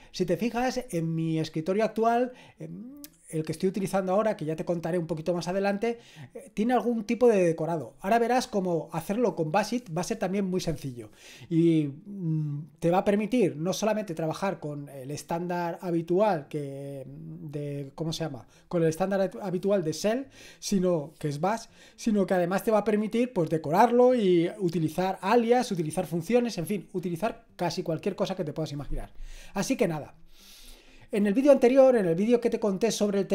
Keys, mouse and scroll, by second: 3.1-33.3 drag.